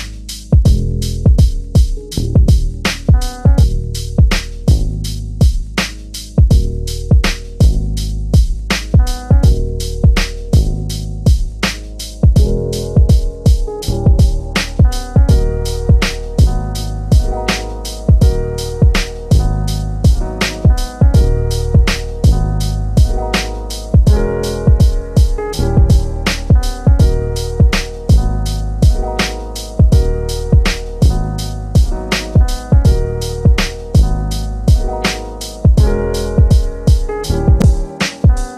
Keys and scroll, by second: 5.4 3, 21.8 l, 24.3 l.